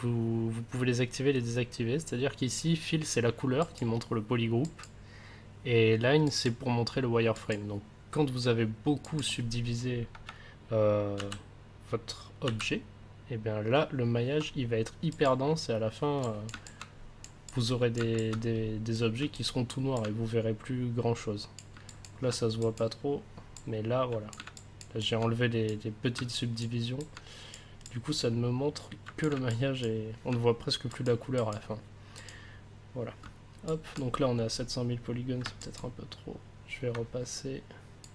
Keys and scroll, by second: 11.1 ctrl+d, 12.4 ctrl+d.